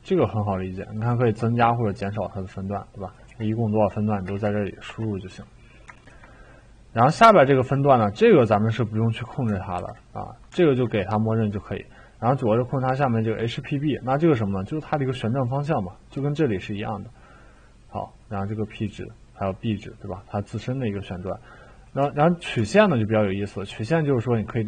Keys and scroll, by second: 3.2-4.4 typing, 4.8 Return, 9.8 ctrl+z.